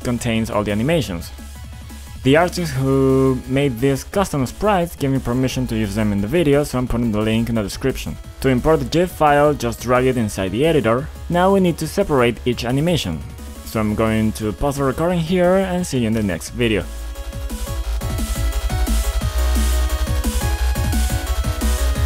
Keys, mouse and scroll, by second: 2.0 click, 2.2 click, 5.5 click, 6.9 click, 9.3 click, 10.2 click, 11.5 click, 11.7 double click, 14.8 click, 15.1 click, 15.2 double click.